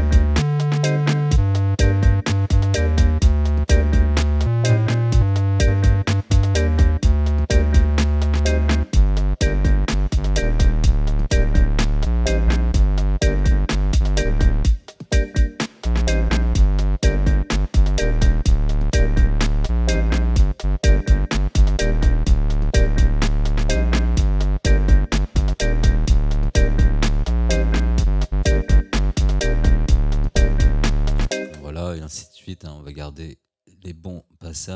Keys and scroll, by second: 31.5 space.